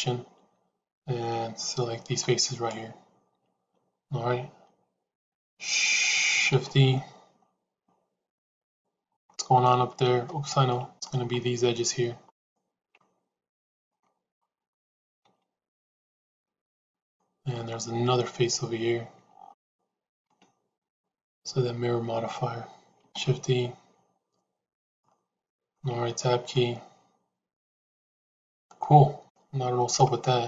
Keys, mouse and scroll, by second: 6.3 shift+e, 9.1 middle click, 10.2 ctrl+z, 10.6 middle click, 12.2 shift+click, 13.8 middle click, 15.1 shift+e, 17.0 middle click, 20.3 middle click, 23.0 shift+e, 24.9 middle click, 25.8 Tab, 26.4-29.2 middle drag, 29.7 Tab.